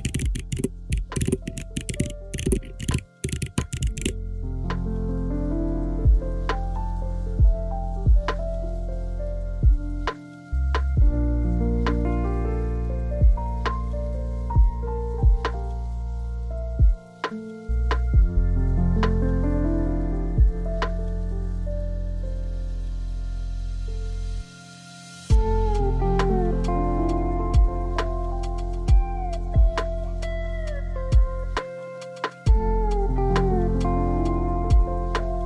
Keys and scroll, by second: 4.4-5.2 typing, 9.2-10.1 typing, 13.5-13.8 typing, 13.9 Return.